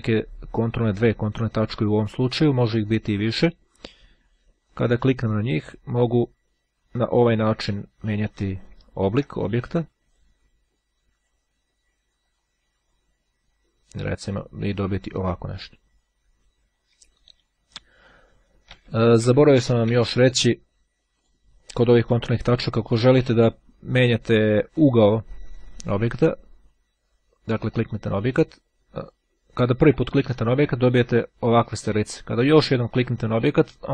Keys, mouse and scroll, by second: 0.1-1.1 ctrl+scroll up 1, 4.6 click, 6.1-8.1 drag, 8.1-8.7 scroll up 2, 8.9-9.5 ctrl+scroll down 2, 10.2-11.8 drag, 12.3-14.9 drag, 17.0 ctrl+z, 21.2 click, 27.1-28.5 drag, 29.1 click, 30.4 click, 33.1 click.